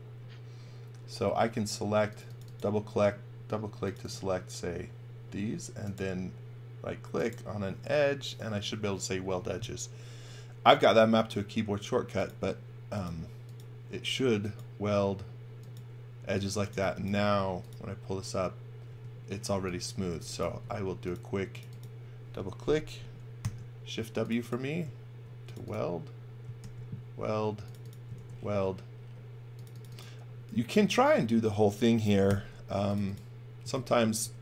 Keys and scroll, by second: 16.3-17.7 typing, 18.9 space, 19.5 x, 19.9 v, 20.5 space, 23.4 shift+w, 26.6 shift+w, 28.2 shift+w, 32.3 shift+w, 33.7 shift+w.